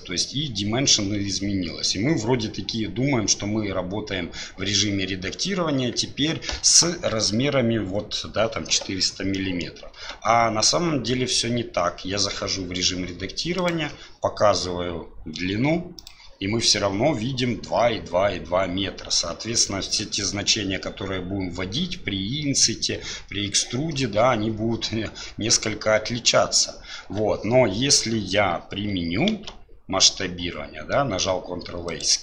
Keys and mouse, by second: 9.5 click, 10.1 Tab, 29.3 ctrl+a.